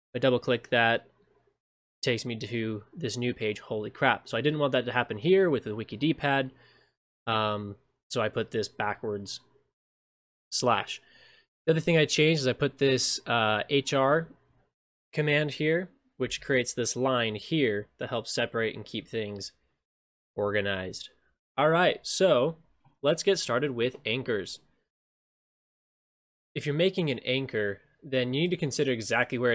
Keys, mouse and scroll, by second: 0.1 click, 0.2-4.4 drag, 8.4 click, 12.8 click, 16.4 ctrl+shift+space, 18.5 scroll down 6, 19.7-20.4 scroll up 8, 22.2 scroll down 10, 22.8 scroll, 22.9-25.4 scroll down 8, 25.4 middle click, 25.4 scroll down 1, 25.4 scroll, 25.5 middle click, 25.5-26.1 scroll down 1.